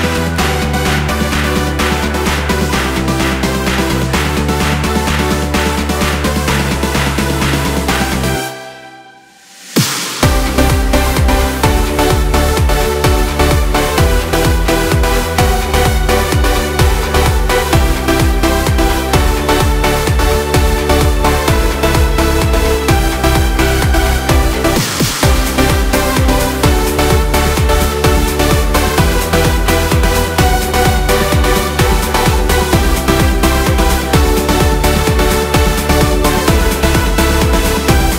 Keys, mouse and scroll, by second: 3.9 ctrl+middle click, 4.9 shift+middle click, 7.4 right click, 10.2 right click, 13.7 right click, 17.9 click, 20.5 space, 23.1 space, 24.4 z, 27.2 space, 29.7 space, 31.7 click, 33.2 click, 36.2 space.